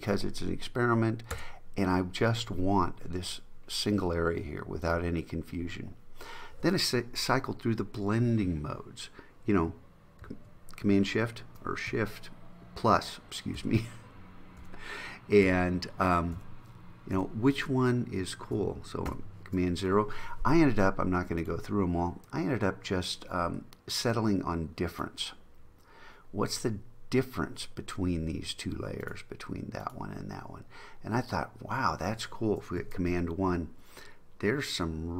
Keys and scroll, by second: 13.6 shift+=, 19.3 super+0, 32.9 super+1.